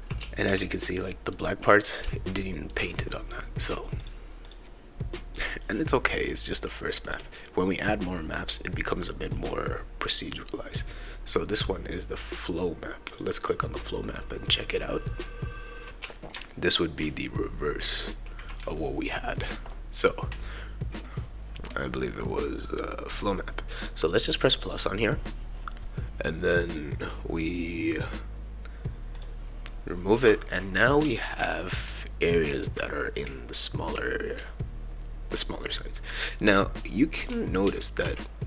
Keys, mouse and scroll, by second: 0.2 shift+e, 0.5 w, 1.7 scroll up 2, 2.0 shift+right click, 2.0 e, 2.7-3.1 scroll up 2, 4.0 click, 4.4 click, 5.4 click, 7.0 click, 7.4-7.8 scroll down 2, 13.1 click, 15.2-19.5 right drag, 16.0 s, 17.0 shift+s, 18.6 shift+d, 23.8-24.9 drag, 26.6 click, 29.2 click, 30.2-38.1 right drag, 31.0 w, 31.8 a, 33.2 q, 34.4 a, 37.3 s.